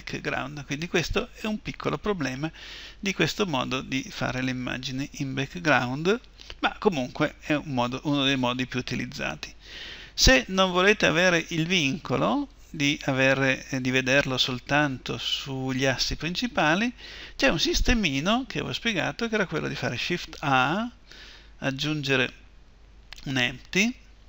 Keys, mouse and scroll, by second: 5.4 KP_1, 12.5-19.2 drag, 20.0 shift+a.